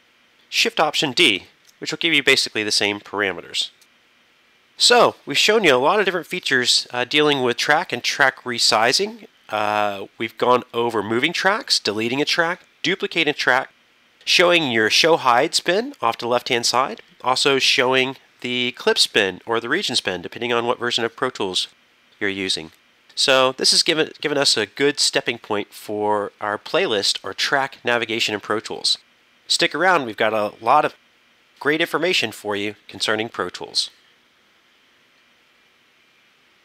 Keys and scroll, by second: 1.4 alt+shift+d, 4.0 super+..